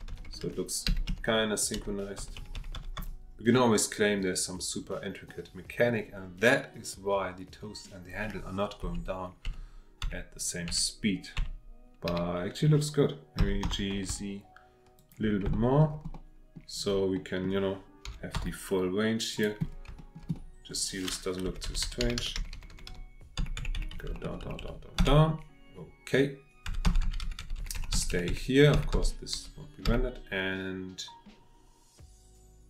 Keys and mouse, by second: 2.2 Right, 2.4 Right, 2.5 Right, 2.7 Right, 3.0 Right, 5.3 click, 8.8 Right, 9.5 Right, 10.0 Right, 10.7 Right, 11.4 Right, 12.1 Left, 13.4 g, 13.6 z, 15.0 shift+middle click, 15.6 middle drag, 16.4 drag, 17.2 click, 18.1 g, 18.3 z, 19.3 click, 20.0 shift+click, 20.4 click, 21.4 Left, 21.6-23.4 Left, 23.4 Right, 23.6 Right, 23.7 Right, 23.9 Right, 24.1 Right, 24.2 Right, 24.4 Right, 24.6 Right, 25.0 Right, 26.7-28.7 Right, 29.3 Left, 29.8 Left.